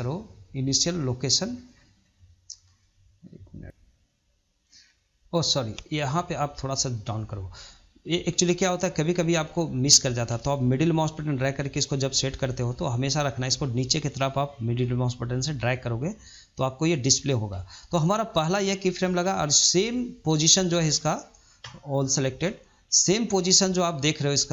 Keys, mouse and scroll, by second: 2.2-3.9 shift+middle drag, 6.1-14.2 middle drag, 15.9-18.5 middle drag, 18.5-21.7 drag, 22.4 ctrl+Left, 24.3 ctrl+Left.